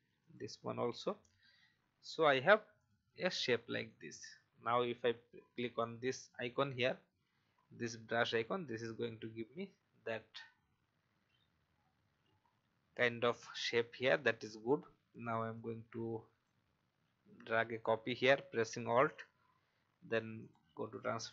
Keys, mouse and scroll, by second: 0.2 click, 0.5 Delete, 2.3 v, 2.7 click, 10.5-11.1 scroll up 1, 11.8-12.1 scroll down 1, 13.5 alt+scroll down 1, 14.1 alt+scroll up 1, 15.5 alt+click, 18.1 right click, 20.4 click.